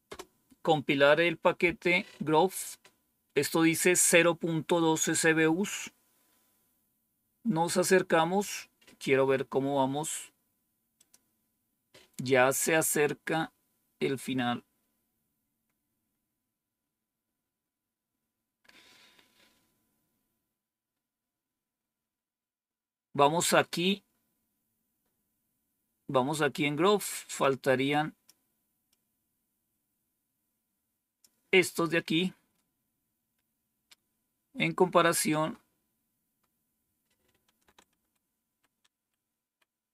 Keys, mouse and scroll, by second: 10.9 click, 12.8-14.0 scroll down 5, 14.5-14.9 scroll down 2, 15.3-16.1 scroll down 2, 16.1-17.4 scroll down 1, 17.4-18.8 scroll down 1, 18.9-19.6 scroll down 1, 20.2-20.9 scroll down 1, 27.3 click, 28.8-31.1 drag, 37.8 ctrl+-, 38.4 ctrl+-, 38.8 ctrl+-.